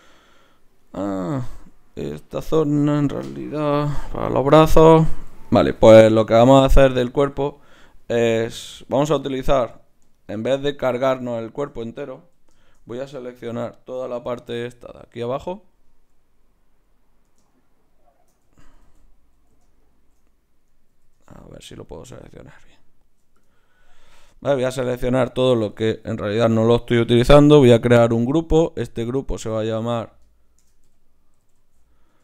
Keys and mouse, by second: 1.5 Tab, 2.7 Tab, 3.6 g, 4.7 Tab, 5.8 z, 8.1-12.6 right drag, 12.2 KP_1, 14.4 b, 17.5-18.8 right drag, 18.6 ctrl+z, 18.8 ctrl+z, 20.9 ctrl+z, 21.6 z, 22.7-23.8 drag, 25.1 z, 25.9 z, 27.7-31.7 drag.